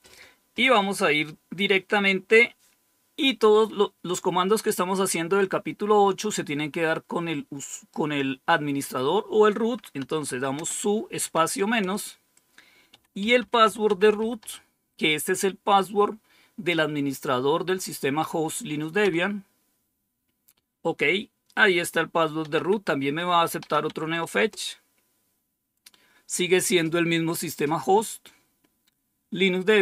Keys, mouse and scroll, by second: 9.9-14.8 typing, 18.9 Return, 22.1-24.0 typing, 24.2 Return.